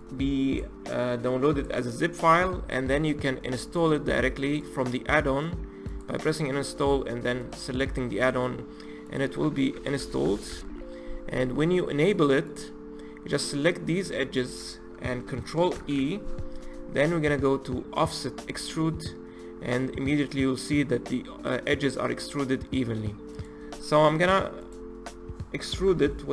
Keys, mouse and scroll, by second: 3.6-6.1 drag, 15.7 ctrl+e, 24.5-26.3 drag.